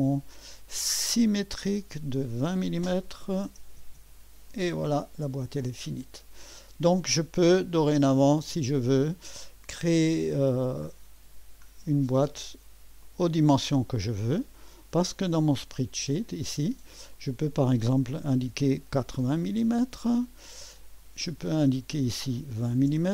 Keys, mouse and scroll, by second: 1.4 click, 2.2 click, 3.3-4.3 typing, 5.7-6.9 drag, 5.7 typing, 18.3-19.7 typing, 21.0 click, 22.6 typing.